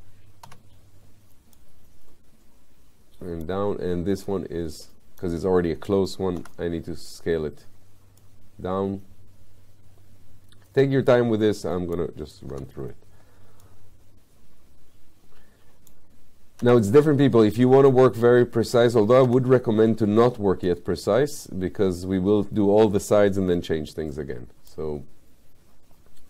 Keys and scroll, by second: 0.5 w, 6.4 r, 12.6 w, 16.6 r, 19.3 w.